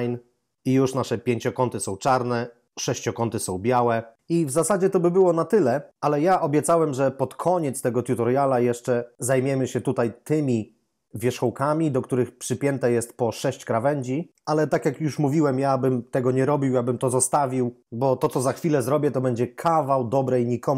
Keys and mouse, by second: 5.4 Tab, 8.4 Tab, 9.6 right click.